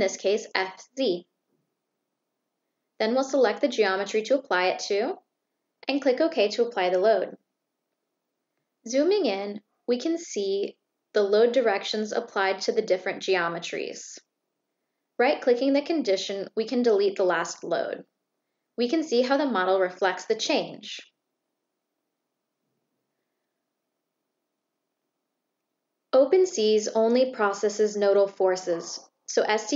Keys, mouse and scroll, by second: 0.1-0.7 drag, 7.2 click, 15.8 click, 17.4 click.